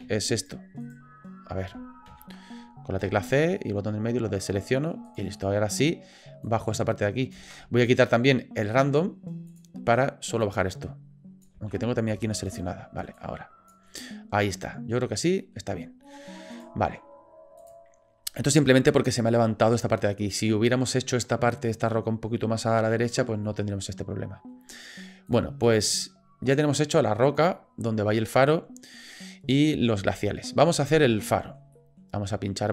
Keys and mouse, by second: 0.8 click, 2.1 ctrl+z, 3.0 c, 5.3 click, 6.4 click, 7.4 ctrl+z, 9.5 click, 10.4-11.4 drag, 11.6 ctrl+z, 12.5 shift+click, 13.2 click, 13.9-15.5 middle drag, 16.0 middle click, 16.5 click, 17.8 click, 23.4-24.5 middle drag, 25.4 click, 26.4-27.2 middle drag, 31.2-31.6 shift+middle drag, 31.7 middle drag.